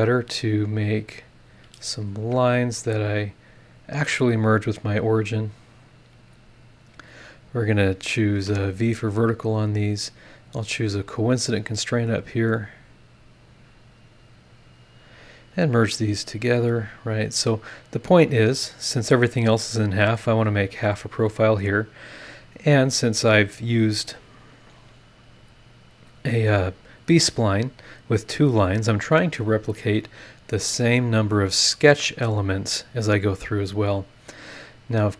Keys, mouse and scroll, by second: 0.3 click, 1.1 click, 1.5 click, 1.9 scroll up 1, 2.2 Escape, 3.2 click, 3.9 click, 5.7 click, 6.9 click, 8.0 click, 8.5 v, 9.1 scroll down 2, 11.0 click, 11.4 middle click, 13.3 click, 14.8 click, 15.7 scroll down 1, 16.8 click, 17.9 click, 18.2 middle click, 18.6 scroll down 1, 18.9-19.7 scroll up 1, 19.7 middle click, 20.3-23.3 scroll up 1, 31.3 click, 33.4 click, 34.4 click.